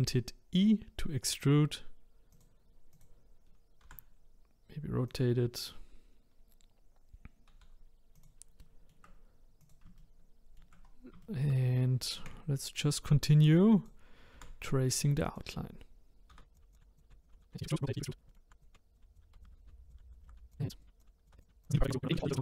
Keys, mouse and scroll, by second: 2.9 click, 3.8 r, 7.6 g, 8.6-9.6 shift+middle drag, 9.6 click, 10.0 shift+middle click, 10.8-11.2 scroll down 1, 11.2 shift+middle click, 12.2 e, 14.3 r, 16.3-22.3 typing, 18.2 scroll down 2, 18.3 shift+middle click, 19.5 shift+middle click, 20.2 shift+middle click, 21.7 shift+middle click.